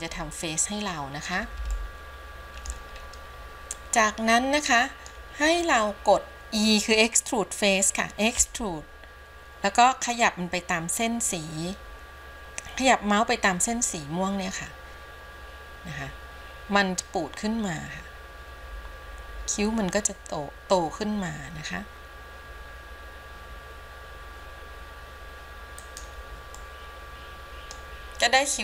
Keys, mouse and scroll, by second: 0.5-1.5 middle drag, 2.0 shift+middle click, 3.3-3.6 scroll up 1, 4.0-5.4 middle drag, 8.6 e, 26.7-28.0 middle drag, 28.5-28.6 scroll down 1.